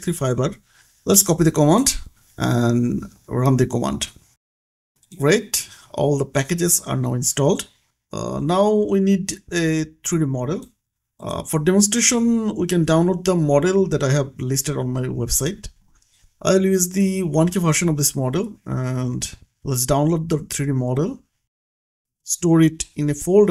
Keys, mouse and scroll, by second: 2.5 click, 3.6 Return, 7.6 click, 9.2-11.2 scroll down 1, 11.4 click, 12.6 middle click, 13.6 click, 15.6-17.6 scroll down 1, 19.2 click.